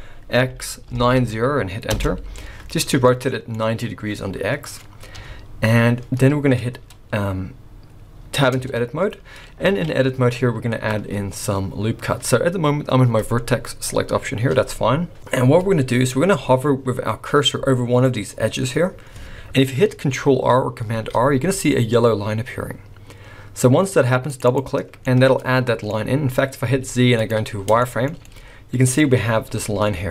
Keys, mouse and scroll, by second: 2.8-3.2 scroll down 7, 3.1 middle click, 3.6-4.1 scroll up 4, 5.1 KP_1, 6.4-8.3 scroll down 3, 8.6 Tab, 9.0-9.4 scroll up 2, 9.7 alt+a, 15.8-18.9 scroll up 2, 21.0 ctrl+r, 25.1 middle click, 26.3 scroll up 1, 26.7 z, 27.8 shift+scroll up 1, 27.9 shift+middle click, 28.3 middle click.